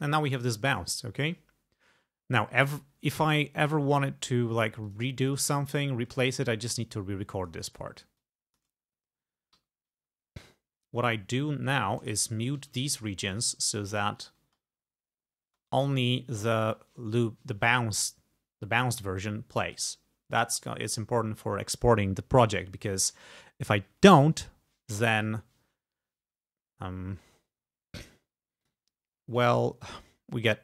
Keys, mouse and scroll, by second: 0.4 click, 4.9 click, 5.3 click, 6.7 click, 8.3 click, 9.6 g, 10.7-11.0 scroll down 2, 11.7 click, 12.6 alt+1, 13.3 alt+click, 13.6-13.9 scroll up 2, 14.2 click, 14.5 space, 15.5 space, 18.2 scroll down 2, 20.1 scroll up 2, 26.7 scroll down 2, 28.1 scroll up 2, 28.7 click, 29.5 scroll down 2, 30.3 scroll up 2.